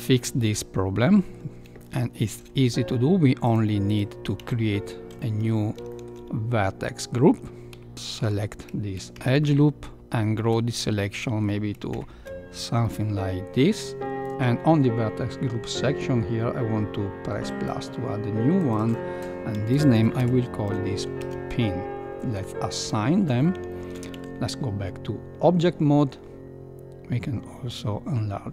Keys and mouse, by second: 0.9-1.3 middle drag, 1.7-2.3 shift+middle drag, 3.4 click, 3.8 click, 4.4 Tab, 5.1 middle click, 5.9 shift+middle click, 6.8 middle click, 9.1 ctrl+KP_Add, 9.3 ctrl+KP_Add, 11.2 middle click, 11.9 ctrl+KP_Add, 12.8 middle click, 17.4 click, 18.5-19.6 drag, 20.7 click, 24.2 Tab, 27.7 click.